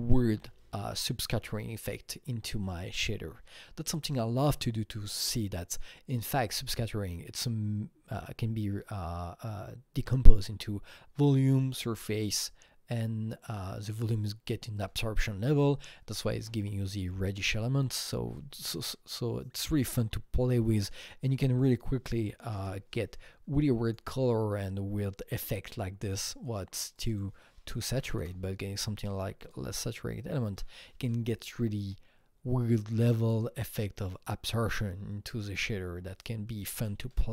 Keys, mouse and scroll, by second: 21.6 KP_Enter, 21.6 click, 21.6 KP_5, 21.7 double click, 22.0 double click, 22.4 KP_0, 22.6 KP_Enter, 23.8 click, 26.1 click, 27.1 double click, 27.7 KP_0, 27.9 KP_Decimal, 28.0 KP_1, 28.2 KP_Enter, 29.4 click.